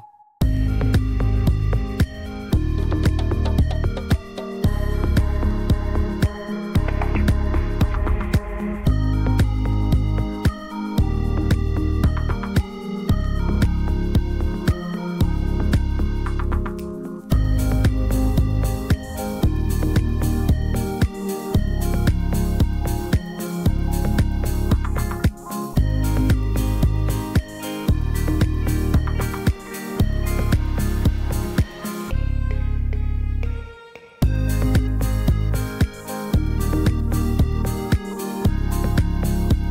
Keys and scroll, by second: 10.7 Tab, 11.0 e, 19.2 \, 23.4 p, 30.3 x, 33.2 e, 39.4 \.